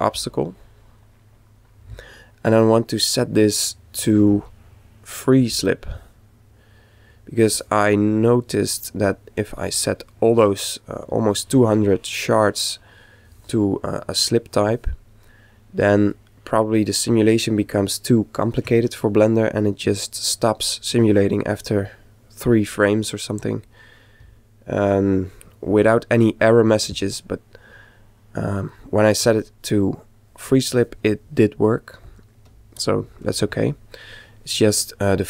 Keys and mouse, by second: 4.0 click, 8.6-10.4 middle drag, 12.5-14.4 middle drag, 15.1-17.0 middle drag, 17.9-20.6 middle drag, 27.0-30.6 middle drag, 34.9-35.2 middle drag.